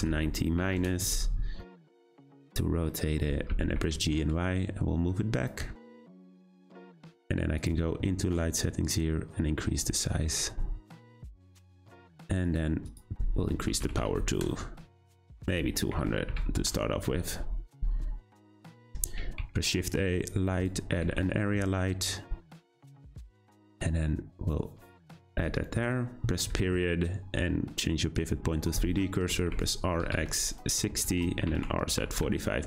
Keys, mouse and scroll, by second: 1.6-1.9 middle drag, 1.9-2.9 scroll down 4, 2.9 middle click, 3.3 scroll up 2, 3.5 g, 5.6 `, 7.6 click, 8.9-11.9 drag, 12.1 click, 12.9-14.0 drag, 14.0 0, 15.3 click, 16.3 0, 20.8 shift+a, 21.0 g, 26.5 ., 29.3 r, 31.4 r.